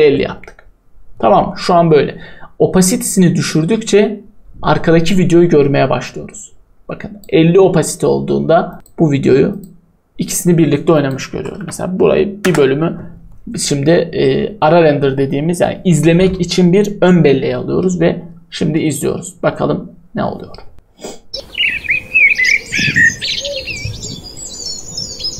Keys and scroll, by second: 11.5 b.